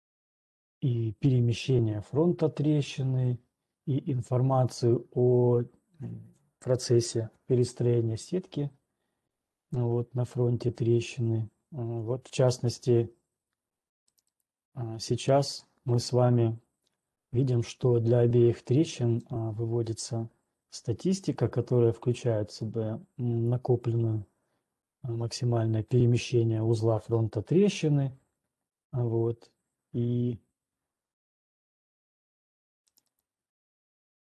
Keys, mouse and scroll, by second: 12.4-13.4 scroll, 13.4 ctrl+2, 14.4 right click, 15.6 ctrl+1, 15.9 click, 18.9 click, 20.4 click, 25.9 click, 32.9 right click, 33.8 scroll.